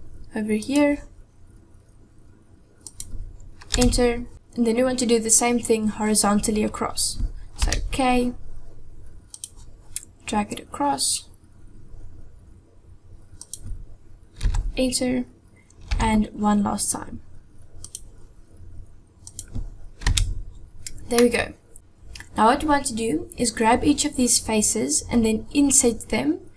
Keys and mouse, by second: 7.7 k, 15.9 k, 21.2 middle click.